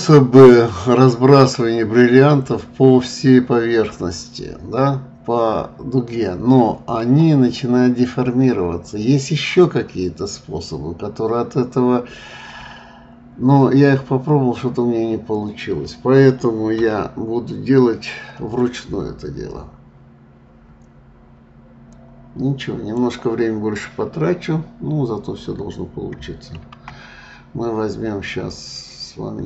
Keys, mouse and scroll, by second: 16.8 KP_7, 21.9-24.9 drag.